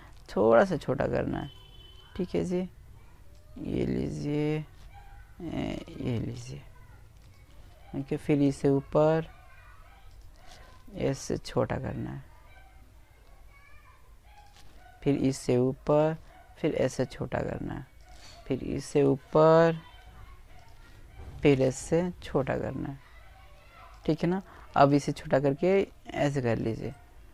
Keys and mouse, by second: 1.1 click, 3.2 s, 5.0 click, 5.9 e, 7.9 click, 9.0 s, 12.9 e, 13.7 click, 14.5 s, 15.8 click, 16.7 e, 18.4 click, 19.2 s, 22.0 middle click, 23.5 click, 23.6-24.6 right drag, 25.0 right click, 25.3-27.3 middle drag.